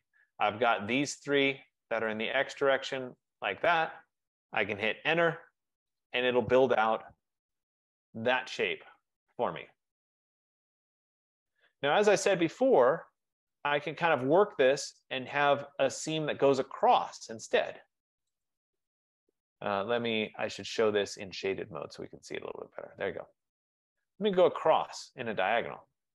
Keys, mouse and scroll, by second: 1.2 click, 2.3 shift+click, 2.3 shift+click, 3.4 shift+click, 4.9 Return, 7.0 click, 8.2 middle click, 13.2 right click, 14.1-14.8 scroll down 3, 14.8-18.3 scroll up 3, 18.6 click, 20.8 click, 21.7 click, 24.1 click, 25.6 click.